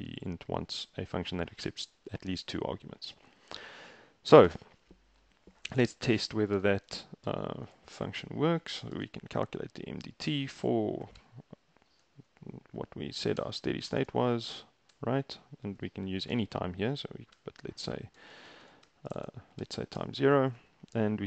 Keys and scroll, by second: 4.5 shift+Return, 6.1 Return, 6.6-9.5 typing, 10.8-12.1 typing, 13.4-15.0 typing, 16.4 BackSpace, 17.4-20.0 typing.